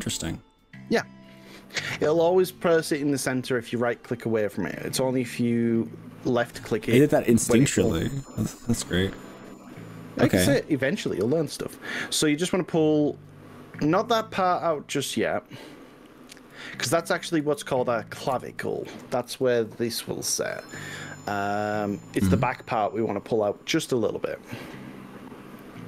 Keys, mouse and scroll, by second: 1.4-2.0 drag, 11.2 g, 11.6 y, 16.2 click, 16.8 ctrl+z, 17.6 ctrl+z, 19.0 ctrl+z, 20.6 click.